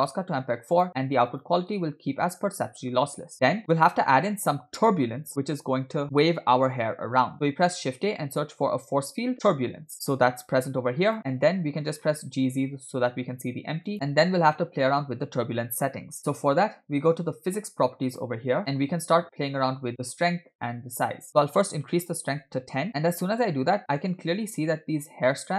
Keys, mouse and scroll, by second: 0.0-0.9 drag, 1.9 click, 3.6-4.3 scroll down 2, 7.7 shift+a, 11.8 g, 18.1 click, 21.3-22.7 drag, 23.2-23.5 scroll up 3, 24.2-24.6 scroll up 2.